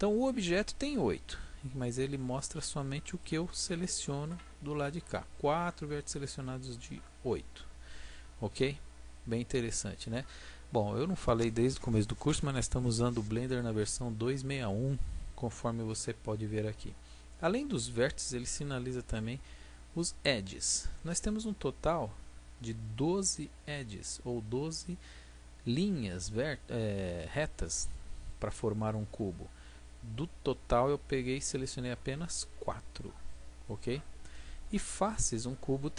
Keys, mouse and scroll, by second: 3.0 b.